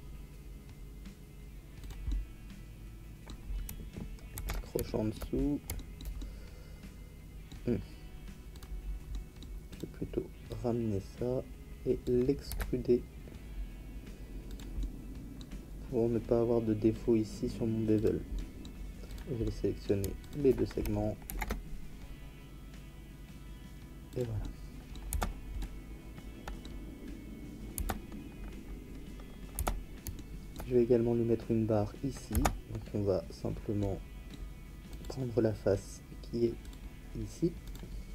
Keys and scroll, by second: 4.3 ctrl+z, 12.5 e, 21.2 ctrl+b, 25.1 Tab, 27.7 Tab, 29.5 Tab, 32.3 Tab.